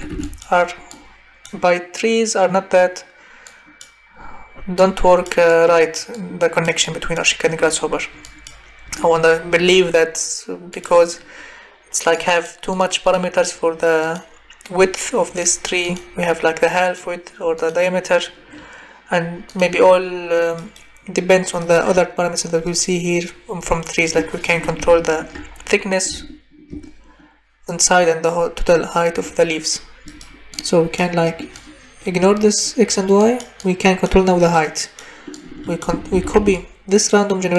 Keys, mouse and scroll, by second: 0.3 ctrl+v, 0.3 click, 36.1 ctrl+c, 36.4 ctrl+v.